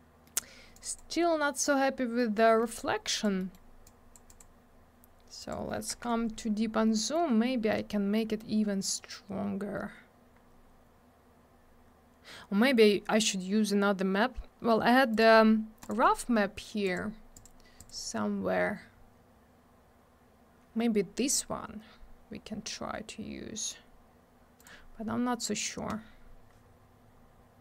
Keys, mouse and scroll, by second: 0.2 middle click, 0.4 middle click, 0.7 click, 0.8 double click, 0.9 click, 0.9 click, 2.2 middle click, 2.4 middle click, 2.6 middle click, 2.8 middle click, 3.1 click, 3.2 double click, 3.4 middle click, 3.5 middle click, 3.8 click, 4.3 click, 4.4 click, 5.4 click, 5.5 click, 6.3 scroll up 1, 7.0 middle click, 7.1 middle click, 7.3 scroll up 1, 7.7 middle click, 7.9 middle click, 8.2 middle click, 9.5 scroll down 1, 10.3-11.5 scroll up 1, 11.5 scroll down 1, 15.1 click, 15.2 click, 15.8 click, 15.9 click, 16.8 click, 16.9 click, 17.3 click, 17.4 double click, 17.8 click, 18.3 click, 21.9 scroll down 1, 22.4 scroll up 1, 24.6 click, 24.6 click, 26.5 scroll up 1, 27.1-27.6 scroll down 1.